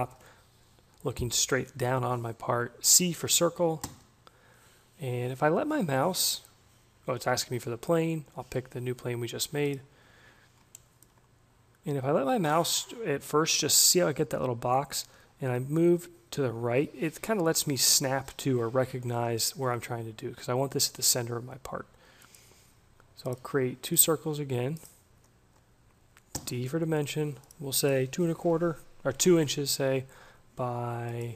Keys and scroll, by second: 25.8 d, 29.2 2, 29.4 Return.